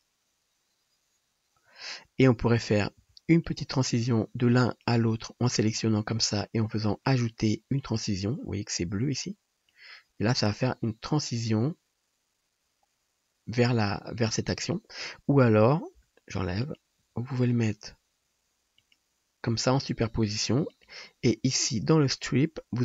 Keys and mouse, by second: 2.7-8.1 drag, 3.0 g, 4.7 middle click, 4.7 right click, 7.3-8.1 middle drag, 7.3-8.1 right drag, 14.9-16.7 drag, 16.0 x, 16.9-20.7 drag, 17.0 g, 20.8-22.0 drag, 22.0 middle click, 22.1-22.8 drag.